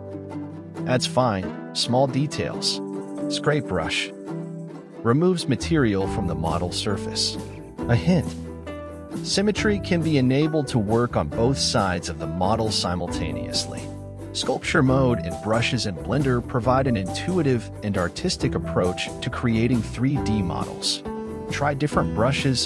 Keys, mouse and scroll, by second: 0.2 ctrl+z, 0.3 ctrl+z, 0.7 scroll down 9, 1.2 click, 1.3 middle click, 1.6 click, 2.5 ctrl+z, 2.7 click, 3.6 middle click, 4.2 ctrl+z, 4.6-5.7 drag, 5.8 ctrl+z, 6.0 click, 7.0 KP_1, 7.1 click, 7.4 ctrl+z, 7.5 ctrl+z, 7.8 click, 8.7 ctrl+z, 8.9-10.0 drag, 10.2 ctrl+z, 10.4 click, 11.2 ctrl+z, 11.4 click, 12.4 ctrl+z, 12.6 click, 13.4 ctrl+z, 13.7 click, 14.3 ctrl+z, 14.5 click, 15.3 scroll down 4, 15.4 middle click, 16.0 ctrl+z, 16.2 click, 16.3 scroll up 2, 16.4 middle click, 16.8 middle click, 17.4 ctrl+z, 17.7-18.2 scroll down 7, 18.2 click, 19.5 ctrl+z, 19.9 click, 20.5 scroll down 10, 20.6 scroll up 9, 21.1 ctrl+z, 21.5 click, 21.7 click, 22.4 click.